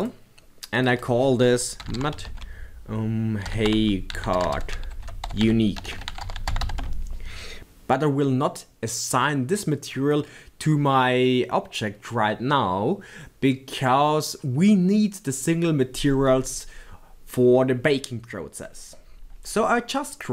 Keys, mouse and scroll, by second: 6.9 BackSpace, 6.9 t.